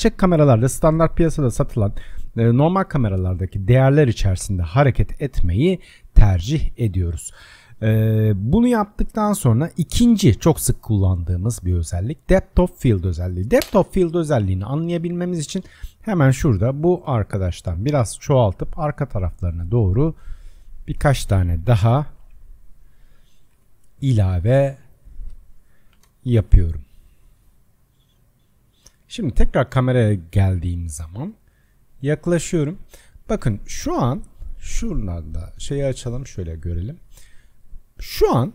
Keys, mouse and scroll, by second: 6.2-6.8 scroll down 6, 7.7-10.7 drag, 13.1 click, 13.6 KP_0, 14.7 click, 15.1-16.2 scroll down 7, 16.2-16.6 scroll down 1, 16.6 shift+d, 21.2 shift+d, 25.1 shift+click, 26.0 shift+d, 29.0 KP_0, 31.2-32.0 scroll up 4, 32.0-32.8 scroll up 7, 32.8-35.5 middle drag, 35.5-36.7 drag, 36.7-38.5 shift+middle drag.